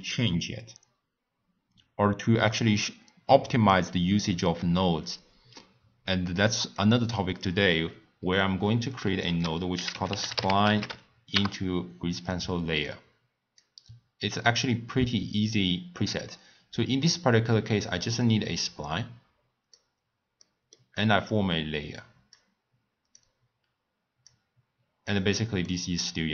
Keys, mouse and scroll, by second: 6.7 click, 8.2-8.6 scroll up 2, 8.6 middle click, 9.2 ctrl+a, 12.8-15.9 drag, 17.5 click, 20.4 middle click, 21.3 click, 23.1-25.1 drag, 25.6-26.3 middle drag.